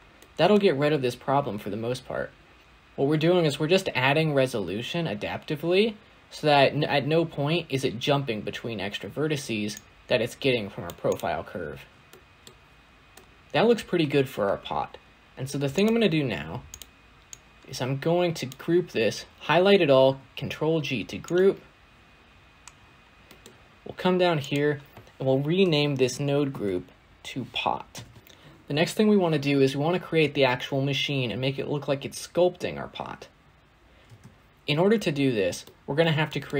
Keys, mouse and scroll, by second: 0.1-2.6 middle drag, 9.6 click, 10.9 click, 11.7 scroll up 1, 12.0-12.4 middle drag, 12.4-13.0 scroll up 1, 13.0 middle drag, 13.3-13.9 scroll down 1, 13.9-14.4 scroll down 12, 15.6 click, 16.2 g, 17.2 click, 19.9 ctrl+g, 21.1-21.7 drag, 21.7-22.4 scroll up 1, 22.6 scroll up 9, 22.7-23.1 scroll down 1, 23.1-24.3 scroll up 3, 23.2 middle click, 24.3-27.3 drag, 28.2 click, 33.9 space, 35.2-35.5 scroll down 2, 35.5-36.0 middle drag, 36.0-36.5 scroll up 3, 36.1 middle click.